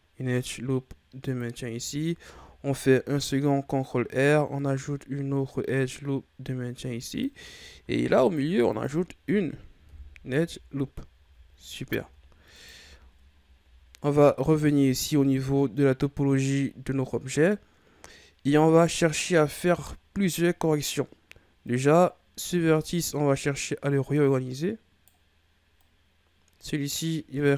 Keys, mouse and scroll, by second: 2.2 ctrl+r, 7.8 ctrl+r, 9.8 KP_1, 10.4 Tab, 11.2 a, 11.8 shift+scroll down 5, 12.1-12.5 scroll up 2, 12.5 right click, 12.8 Tab, 13.3-14.7 ctrl+scroll up 5, 14.7-16.4 ctrl+scroll up 1, 19.7-20.4 scroll down 4, 20.4-21.6 scroll up 3, 21.6 right click, 23.5 right click, 25.8 right click, 27.4 right click.